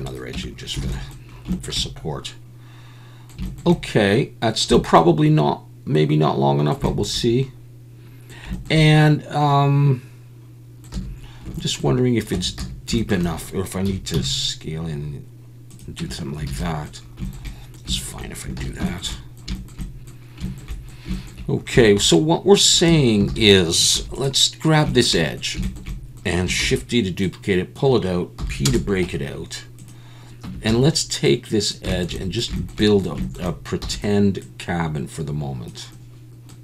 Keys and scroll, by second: 0.3 Tab, 0.8 alt+a, 10.9 a, 12.3 Tab, 12.6 a, 13.9 s, 14.1 z, 16.0 Tab, 16.5 alt+a, 18.6 ctrl+s, 22.9 Tab, 23.3 alt+a, 23.9 2, 26.6 shift+d, 28.4 p, 29.0 Tab, 30.4 Tab, 30.7 a, 33.8 e.